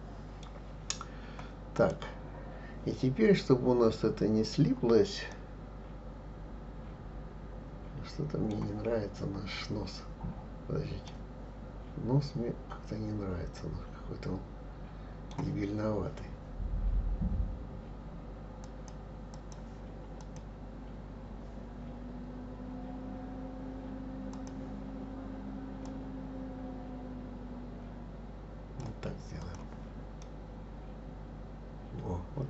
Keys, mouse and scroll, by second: 1.7 click, 5.3-8.4 middle drag, 9.3-10.4 scroll up 3, 10.4-11.1 scroll down 1, 11.1-14.1 middle drag, 18.6-20.3 drag, 24.3 click, 25.9-28.9 drag, 29.4 click, 30.2-32.4 middle drag.